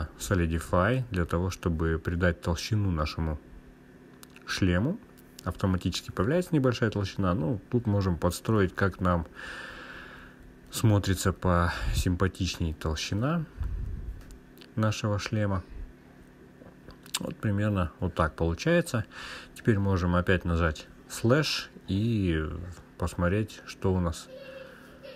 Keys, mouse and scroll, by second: 0.7-1.8 scroll up 2, 2.5-5.1 drag, 5.5-6.3 scroll down 1, 7.3 click, 7.3 scroll down 1, 7.7 click, 8.0 click, 9.2 click, 14.1-15.1 drag, 15.3-16.9 scroll down 2, 16.9-19.1 drag.